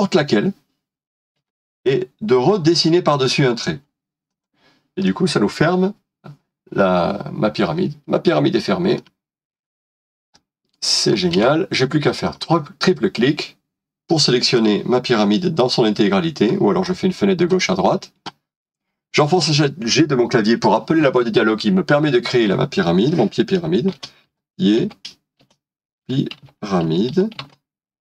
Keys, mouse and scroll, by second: 3.5 l, 5.0 typing, 5.0 middle click, 11.5 space, 12.2 double click, 14.5 middle click, 19.3 typing, 23.7-28.0 typing.